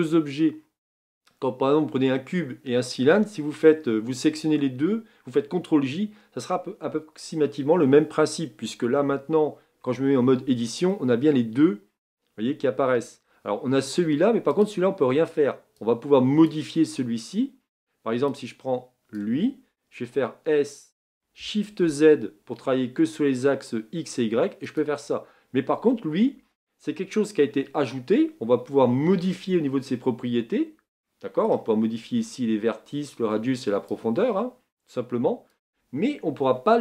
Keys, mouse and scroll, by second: 10.0 Tab, 10.9-14.6 middle drag, 14.6 click, 16.5 click, 19.2 click, 20.2 s, 34.2-36.8 drag.